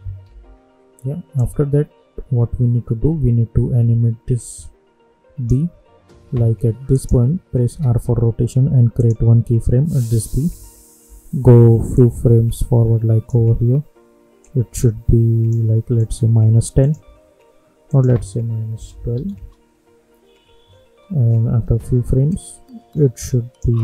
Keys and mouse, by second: 0.2 =, 1.3-6.9 drag, 7.7 r, 10.0 click, 10.5 =, 11.0 =, 11.9-15.9 drag, 17.0 -, 17.8 click, 18.7 -, 19.3 Return, 21.6 =, 22.2-23.8 drag.